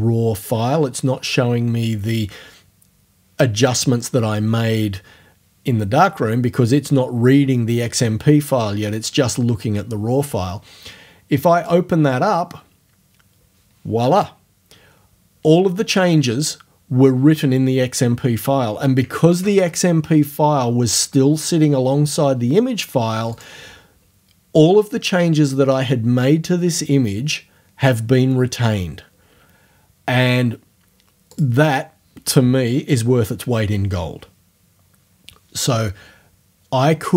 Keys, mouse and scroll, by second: 11.6 click, 19.3 alt+Tab, 19.7 alt+Tab, 23.3-28.3 drag, 30.2 click, 31.3 click.